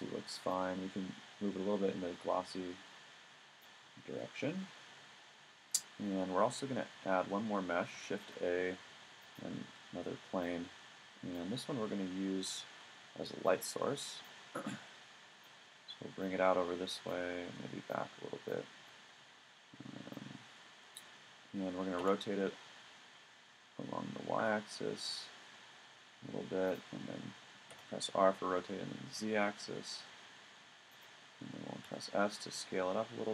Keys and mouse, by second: 0.5-2.5 drag, 4.4 middle click, 8.1 shift+a, 13.5-14.6 drag, 14.6-15.1 middle drag, 16.2-17.1 drag, 18.9-19.6 middle drag, 21.3 middle click, 22.0 r, 25.4 middle click, 26.8-27.2 drag, 27.7 r, 31.8 s.